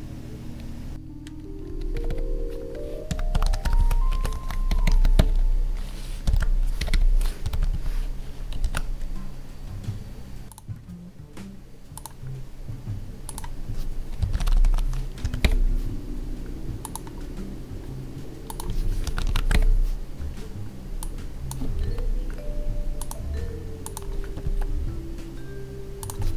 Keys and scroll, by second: 0.9 Down, 4.1 space, 7.7 Tab, 8.6 ctrl+s, 21.8 ctrl+c, 24.5 ctrl+Tab.